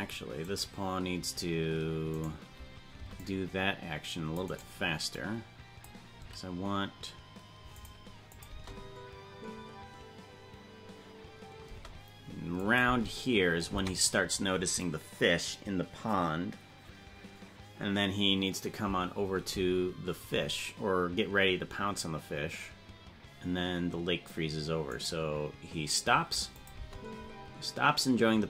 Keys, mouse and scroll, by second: 0.8-2.6 right drag, 3.0 c, 5.2 click, 6.2 s, 8.4 click, 8.6 space, 11.8 space, 12.7 click, 12.9 space, 26.6-27.0 drag, 26.6 right click, 26.9 space.